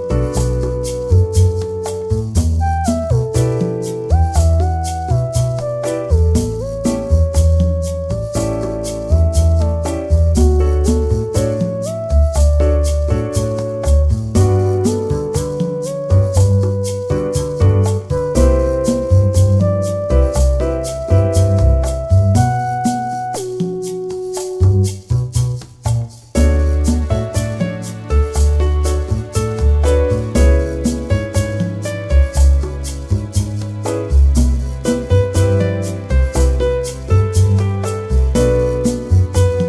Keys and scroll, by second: 14.2 ctrl+=, 15.5 ctrl+-, 16.9 ctrl+=, 18.6 ctrl+=, 19.1 ctrl+-, 20.8 ctrl+0, 32.4 shift+k, 32.9 shift+e, 33.6 shift+p, 34.8 space, 35.3 shift+s, 35.7 shift+a, 37.0 shift+f, 37.4 shift+e.